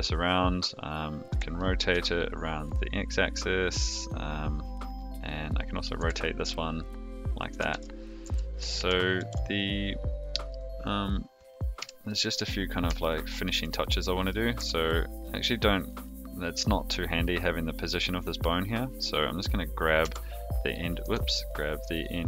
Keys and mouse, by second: 1.3 r, 5.4 click, 5.9 r, 7.7 ctrl+z, 8.2 a, 8.7 alt+r, 9.1 alt+g, 11.7 KP_3, 13.0-13.4 shift+middle drag, 14.5 Tab, 15.2 click, 15.8 click, 20.0 g.